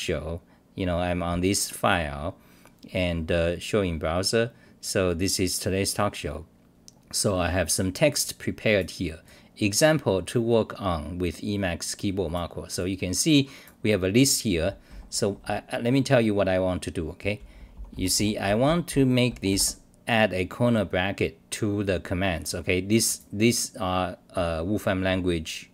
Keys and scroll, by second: 14.9 d, 15.0 d, 15.2 d, 15.4 d, 16.0-16.4 scroll down 5, 17.1-19.4 typing.